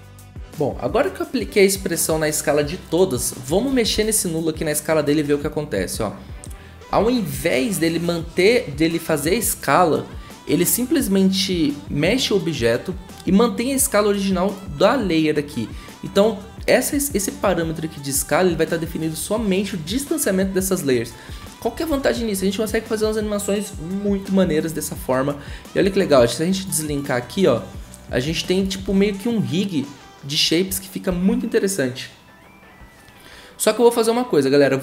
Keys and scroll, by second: 0.3 ctrl+a, 3.9 s, 21.9 ctrl+z, 28.8 ctrl+z, 31.1 ctrl+z.